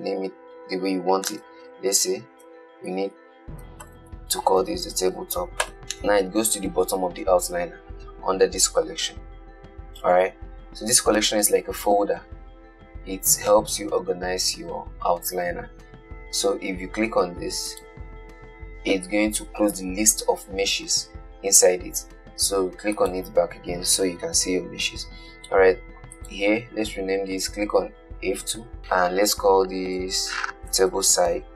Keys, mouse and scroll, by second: 18.0 click, 23.2 click, 26.4 click, 28.8 F2.